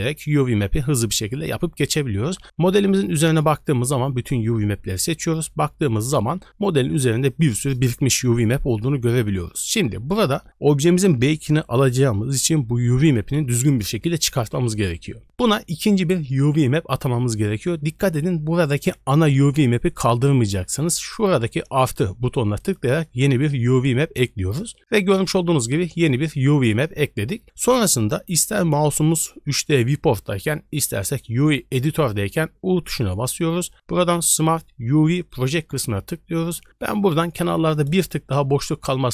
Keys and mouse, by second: 27.4 click, 32.7 u.